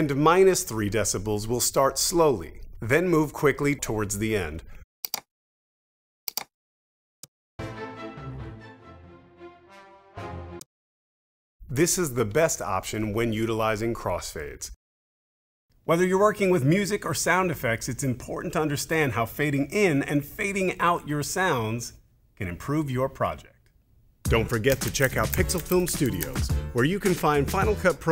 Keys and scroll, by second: 7.2 space, 10.5 space.